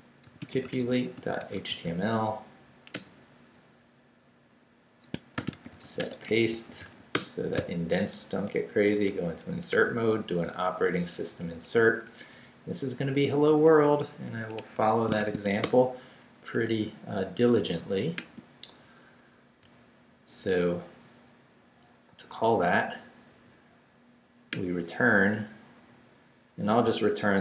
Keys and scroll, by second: 0.0-2.3 typing, 3.0 Return, 5.1-7.6 typing, 9.8 super+v, 11.4 super+Up, 13.1 Down, 14.6 Escape, 15.0-15.9 typing.